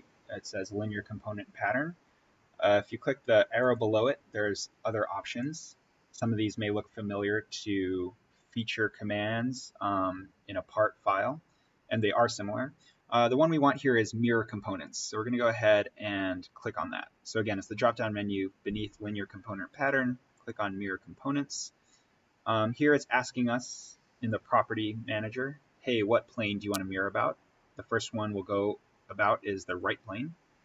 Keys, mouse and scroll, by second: 3.5 click, 20.2 click, 29.6 click.